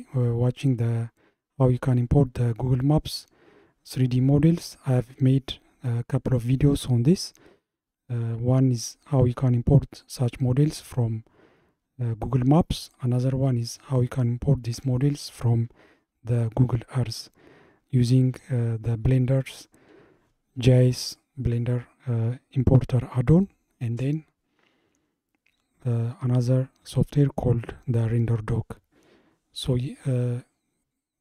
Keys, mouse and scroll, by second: 10.9-13.9 middle drag, 18.4-21.5 middle drag.